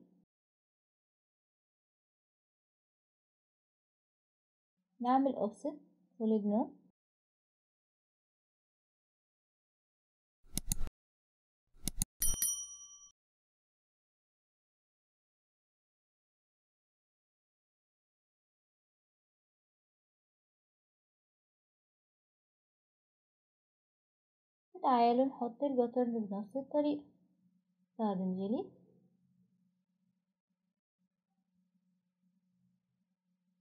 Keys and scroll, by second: 5.1-5.4 typing, 8.4-9.3 typing, 10.3 Delete, 23.4 Delete, 24.9 Return, 24.9 Escape.